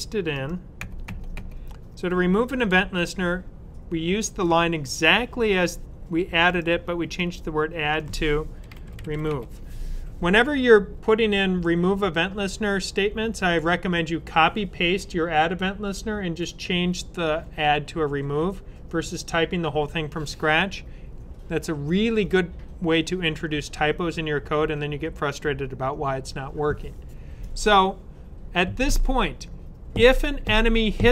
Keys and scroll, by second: 8.2-9.7 typing.